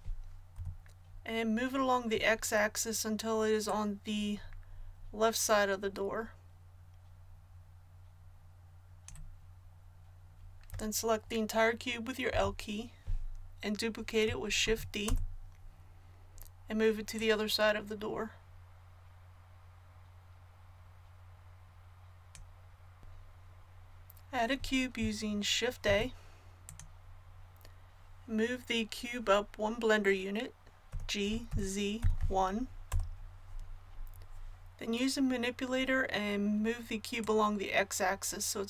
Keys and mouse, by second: 0.5 KP_1, 3.6-12.2 drag, 12.2 l, 14.6 shift+d, 17.1-23.0 drag, 23.0 KP_1, 25.8 shift+a, 30.8 g, 37.1-38.6 drag.